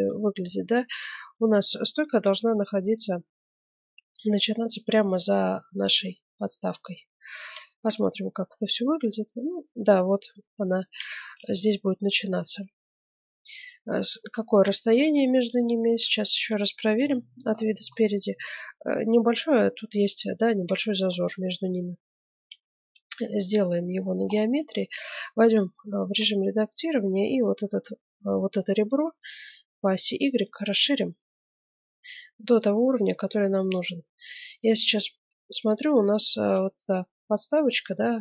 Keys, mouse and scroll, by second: 0.1 middle click, 0.5 middle click, 2.1-4.0 middle drag, 6.7-9.4 middle drag, 7.5 z, 9.4-11.1 drag, 11.1-13.1 middle drag, 13.5-16.4 middle drag, 17.0 KP_1, 19.7 middle click, 20.2-24.7 middle drag, 24.7 Tab, 26.0 ctrl+Tab, 27.1-29.0 right drag, 29.2-30.9 drag, 33.0-36.4 middle drag, 37.0-38.2 middle drag.